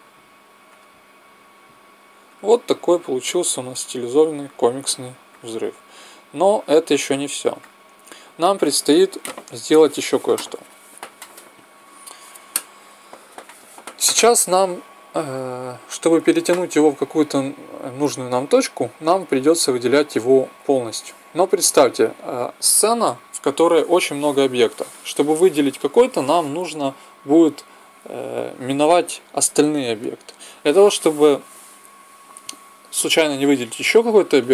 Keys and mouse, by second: 7.5-8.8 drag, 11.1 click, 11.5 t, 19.0-20.9 right drag, 20.4 b, 20.9 middle click.